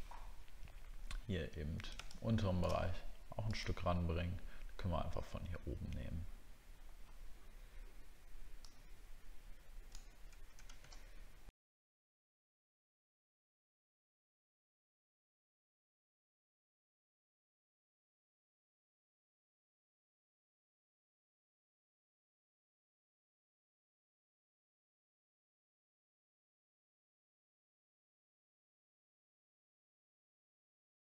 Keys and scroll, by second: 12.4 alt+scroll up 1, 12.8 alt+scroll down 1, 14.4 ctrl+v, 19.6 alt+scroll up 1, 21.0 alt+scroll down 1, 29.7 alt+scroll up 1.